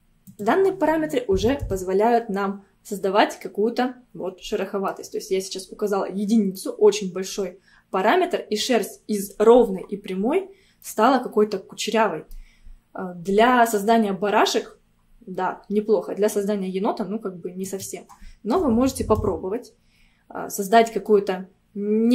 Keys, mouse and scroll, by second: 0.3-2.9 drag, 2.9-3.5 scroll down 2, 3.5-6.5 middle drag, 6.6-9.7 middle drag, 10.9-13.9 middle drag, 17.7-20.3 drag, 20.3 scroll up 1, 21.1-22.1 middle drag.